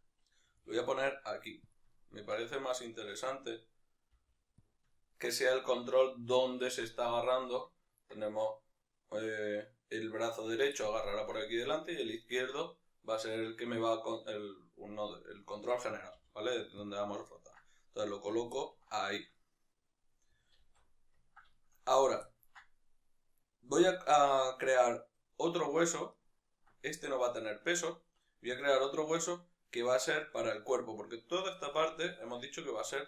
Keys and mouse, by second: 0.6 g, 1.8 click, 1.9-4.7 ctrl+middle drag, 4.2 g, 4.7 click, 5.0-16.9 ctrl+middle drag, 16.2 g, 16.9 click, 17.4-33.0 ctrl+middle drag, 20.8 alt+o.